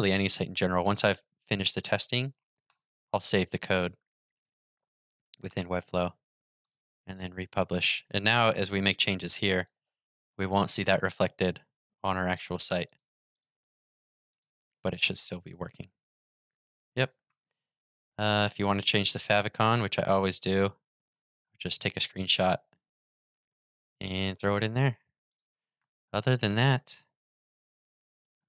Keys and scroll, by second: 11.9 super+w, 14.5 super+r, 20.6 shift+super+4.